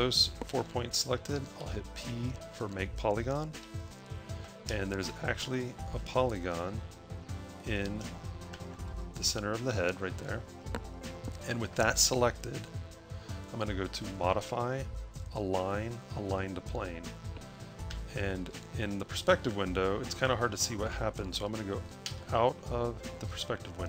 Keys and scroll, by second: 1.5 p, 5.9 space, 19.1 a, 22.3 0, 23.2 a.